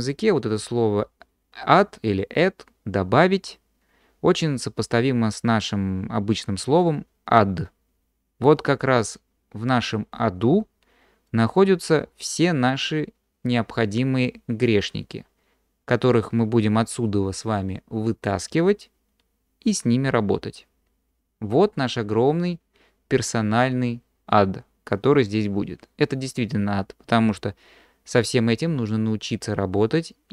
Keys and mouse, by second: 11.4-30.3 drag.